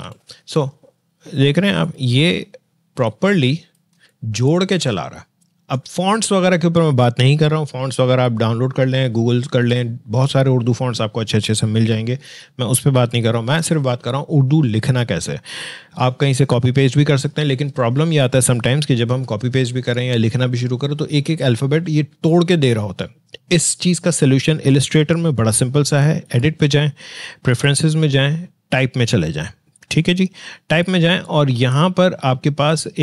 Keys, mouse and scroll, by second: 0.0-0.5 typing.